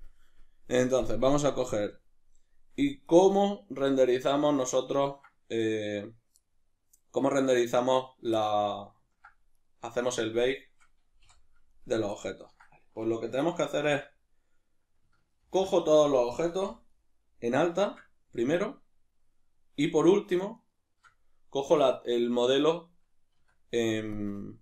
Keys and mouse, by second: 3.1 right click, 3.9-7.7 middle drag, 7.7 right click, 8.4-9.6 ctrl+middle drag, 9.6 right click, 10.0 shift+right drag, 10.5 shift+right click, 11.3 h, 11.7 right click, 12.2-20.6 ctrl+middle drag, 15.4 ctrl+i, 16.7 b, 20.6 shift+right click, 23.3 Tab.